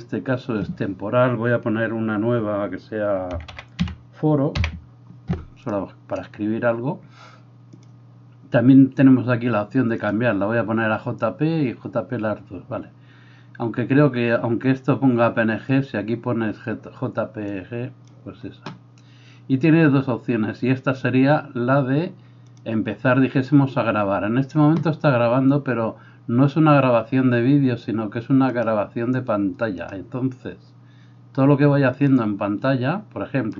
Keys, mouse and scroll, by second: 5.7-7.8 middle drag, 7.8-33.5 drag.